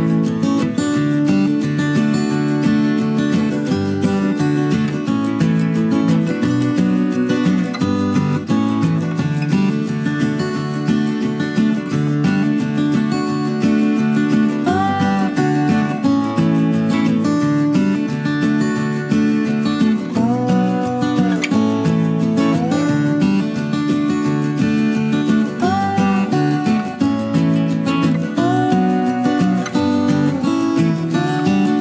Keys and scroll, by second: 14.0-16.6 typing.